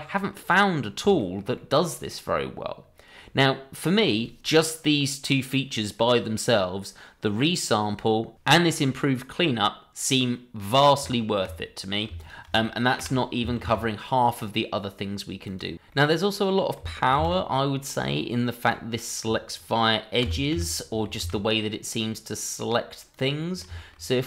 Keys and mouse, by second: 1.1 shift+middle drag, 1.5-4.0 middle drag, 15.9-16.7 middle drag, 17.1 shift+a, 20.5 y, 21.2 x, 23.4 middle drag, 23.7 shift+middle drag, 24.1 middle click.